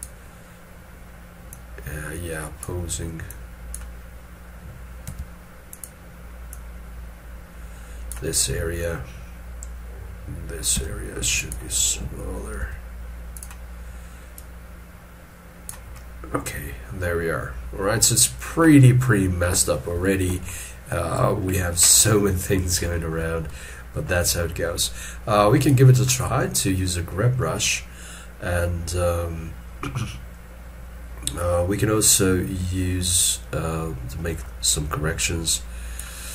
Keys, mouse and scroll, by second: 5.1 f, 10.8 f, 15.9 middle click, 20.0 shift+middle click, 20.4 shift+middle click, 21.7 shift+middle click, 22.9 shift+middle click, 34.2 middle click.